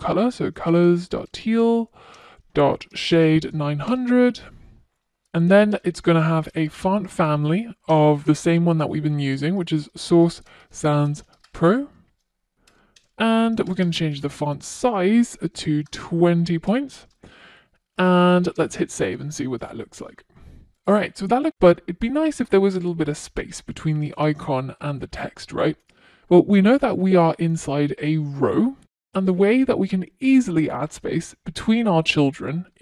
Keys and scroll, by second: 0.3 Return, 2.1 Return, 6.1 Return, 13.0 Return, 16.7 Return, 16.7 super+s.